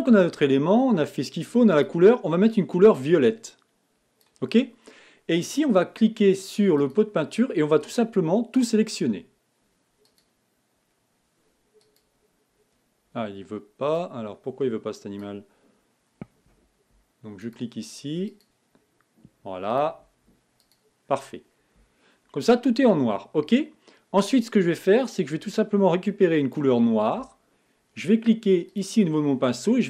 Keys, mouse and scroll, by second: 25.7-29.8 drag.